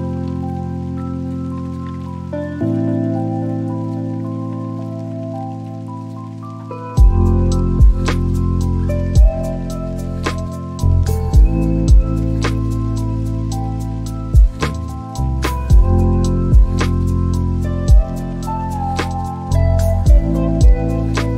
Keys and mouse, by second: 0.6 Tab, 2.4 Right, 5.2 BackSpace, 8.5 shift+s, 8.8 c, 9.3 r, 9.4 a, 11.4 t, 13.5 c, 13.8 h, 20.4 Tab.